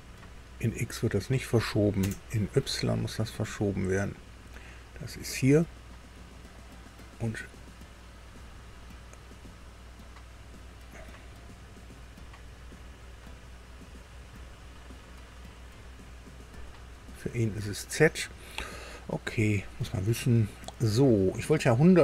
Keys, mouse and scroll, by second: 2.0 KP_0, 3.9 click, 5.4 click, 6.3-7.0 scroll up 2, 7.2-7.5 scroll down 2, 8.4-8.7 scroll up 2, 9.2-9.6 scroll up 2, 10.2 scroll down 2, 11.6-12.4 scroll down 4, 12.5-13.2 scroll down 4, 13.6 scroll down 2, 14.5 scroll up 2, 15.6 click, 16.5-17.2 scroll up 1, 17.4-17.8 scroll up 1, 18.1-18.5 scroll up 1, 19.8-20.2 scroll up 1.